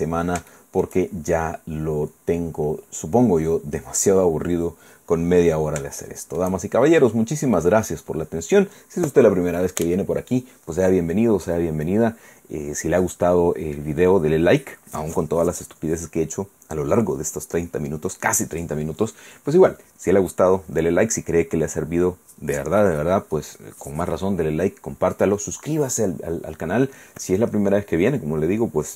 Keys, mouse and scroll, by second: 0.3 scroll down 2, 0.5 shift+click, 1.4 scroll down 1, 3.0-3.4 scroll down 1, 3.5-3.9 scroll down 1, 3.9-4.8 scroll up 1, 4.8 scroll up 1, 5.5 scroll down 1, 6.0 shift+middle click.